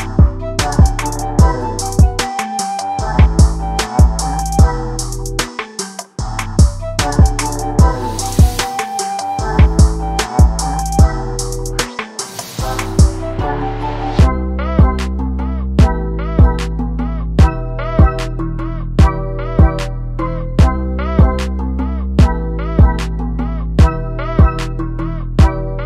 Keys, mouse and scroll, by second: 0.2 scroll down 1, 0.4 alt+a, 0.7 KP_0, 1.4 z, 7.9-8.5 scroll up 4, 8.5-11.4 middle drag, 11.4 click, 12.3 click, 13.6 click, 16.1 drag, 17.4-18.1 drag.